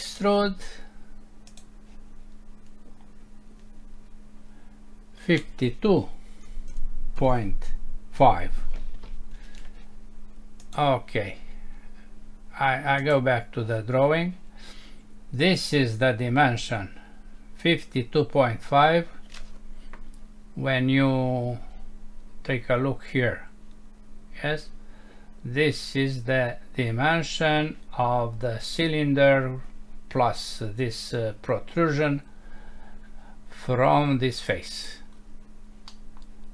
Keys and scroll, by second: 35.9 F6.